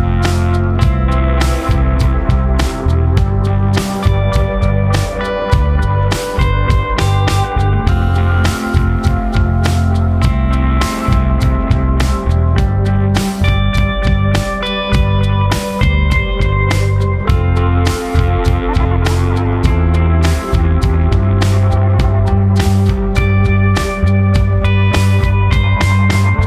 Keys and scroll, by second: 23.9 ctrl+z.